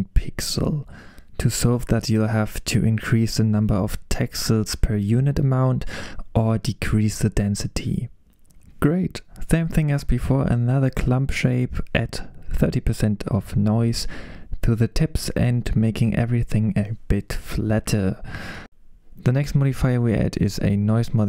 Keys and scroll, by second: 13.2-15.3 typing.